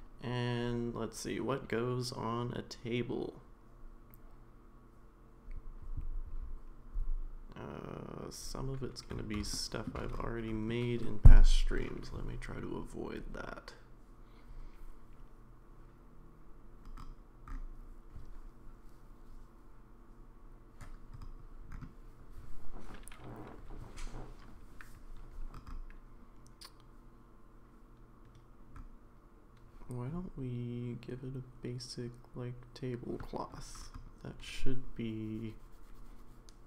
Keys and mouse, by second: 9.5-9.9 shift+middle drag, 11.0-11.8 middle drag.